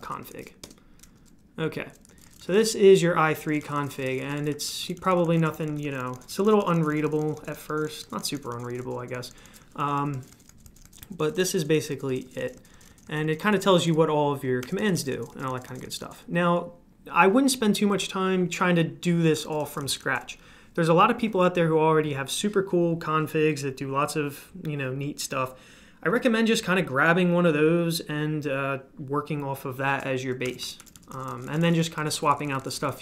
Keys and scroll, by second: 0.0-8.8 typing, 0.6 Return, 10.0-12.2 typing, 14.7-16.3 typing, 19.2-20.0 typing, 30.2-33.0 typing.